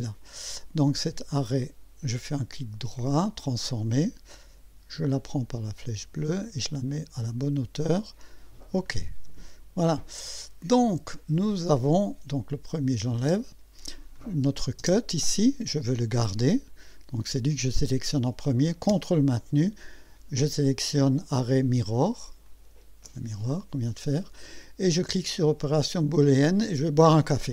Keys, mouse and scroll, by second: 1.4 right click, 3.4 click, 5.2-7.5 drag, 8.3 click, 8.9-10.2 drag, 12.5 click, 13.2 space, 14.2 click, 14.8 space, 22.5 ctrl+click, 26.4 click.